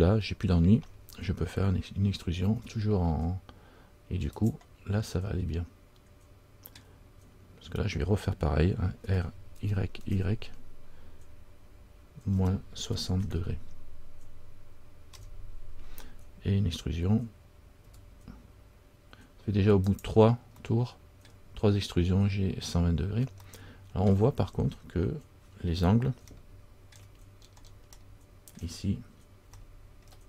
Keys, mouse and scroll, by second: 0.2 middle click, 0.6-2.5 scroll down 1, 2.7 e, 5.3-7.0 scroll up 1, 7.0 middle click, 7.0-8.4 scroll down 1, 18.0 e, 20.8 middle click, 20.8-21.1 scroll up 1, 23.6 middle click, 24.2 scroll down 1, 24.5-26.4 scroll up 2, 27.1 shift+middle click, 27.1-28.1 shift+scroll up 4, 28.2 shift+middle click, 29.0-29.6 scroll up 2, 29.7 shift+middle click.